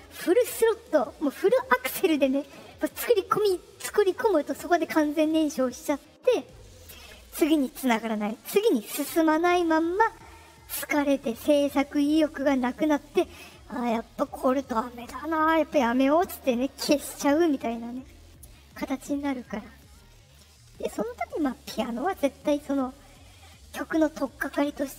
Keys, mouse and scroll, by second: 20.8 click.